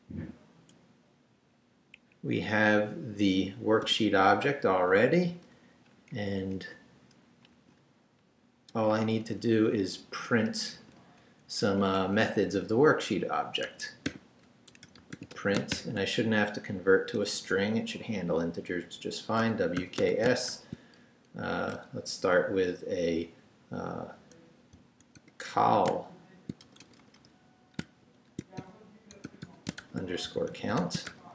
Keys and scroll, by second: 1.9 Up, 3.8 i, 4.8 shift+i, 5.1 shift+3, 5.7 shift+Left, 6.1 Down, 6.6 shift+Down, 7.4 shift+Return, 8.7 BackSpace, 10.5 shift+BackSpace, 10.7 shift+3, 11.6 shift+Up, 13.6 Escape, 14.1-16.2 typing, 19.2-21.0 typing, 24.8 c, 25.4 l, 26.6 shift+BackSpace, 27.8-31.3 typing.